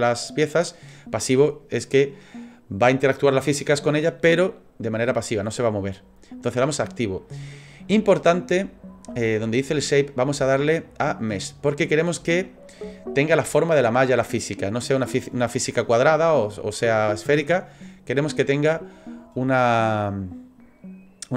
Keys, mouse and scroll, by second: 10.6 click.